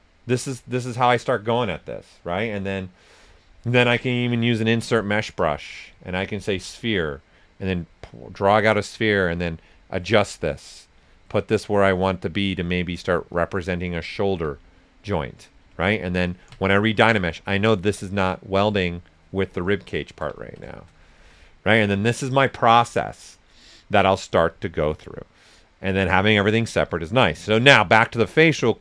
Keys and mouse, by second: 3.7 typing, 5.3 click, 8.5 right click, 9.2 w, 10.0 click, 10.7 right click, 11.6 click, 12.5 right click, 13.3 click, 14.3 q, 14.7 right click, 15.8 ctrl+click, 17.6-20.3 shift+drag, 20.3 ctrl+shift+right click, 27.4 alt+right click, 27.7 ctrl+right click, 28.1 ctrl+s, 28.2-28.8 ctrl+drag.